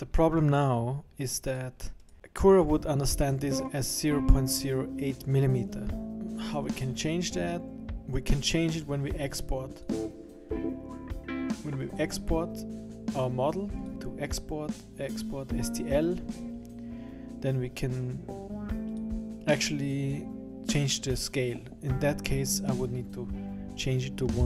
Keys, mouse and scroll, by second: 0.0-0.6 scroll down 2, 1.5 click, 2.0 right click, 9.7 click, 13.8 click.